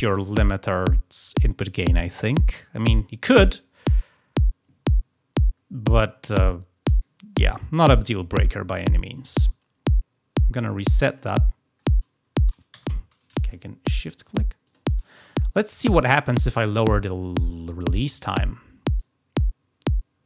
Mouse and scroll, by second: 10.5 middle click, 11.1 click, 11.2 click, 13.4 shift+click, 14.0 shift+click, 14.6 shift+click, 18.9-20.2 drag.